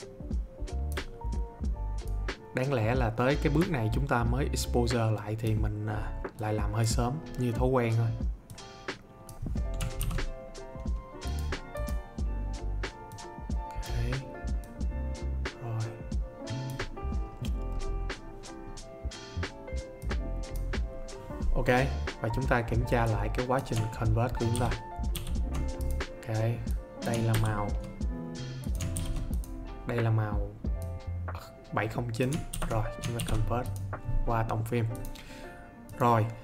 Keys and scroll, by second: 10.0 ctrl+z, 24.5 ctrl+d.